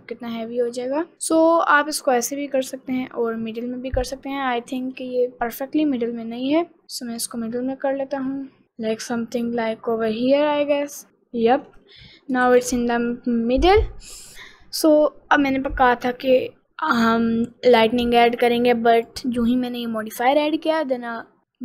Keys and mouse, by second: 5.2 g, 12.7 ctrl+s, 19.3 click.